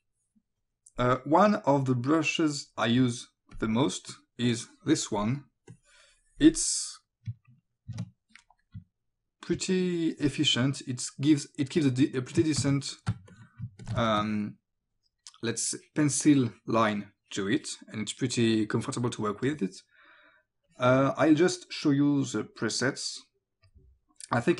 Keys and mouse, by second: 2.2 click, 3.6 click, 5.7 click, 7.9 ctrl+z, 8.8 o, 9.6 click, 13.1 space, 13.3 click, 13.6 ctrl+alt+space, 14.1 click, 20.7 click, 22.2 click, 23.7 click.